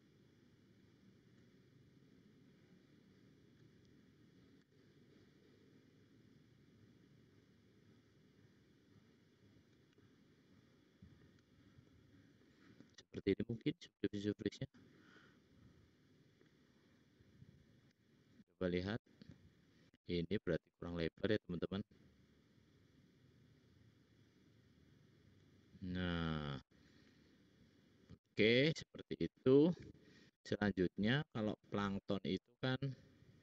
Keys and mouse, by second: 0.4 shift+click, 0.9 shift+click, 4.6 s, 10.0 middle click, 11.7 middle click, 12.0 middle click, 17.1-18.7 drag, 17.9 `, 20.4 l, 21.9 s, 26.0 click, 26.8 middle click, 27.2 middle click, 27.3 middle click, 29.9 `.